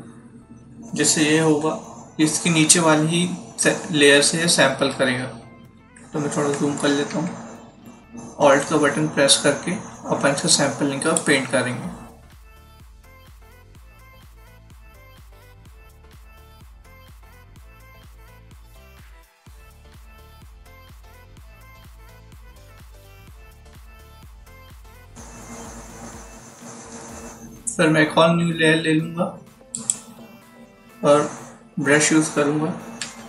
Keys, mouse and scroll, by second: 4.8 alt+scroll up 1, 7.0 =, 10.4 alt+click, 12.3 click, 13.3 click, 14.1 click, 14.5 typing, 15.8 click, 16.0 click, 16.8 alt+click, 17.4 click, 18.0 alt+click, 18.2 click, 18.7 click, 21.1 click, 22.1 click, 22.2 click, 22.5 click, 22.9 click, 29.6 click, 32.9 b.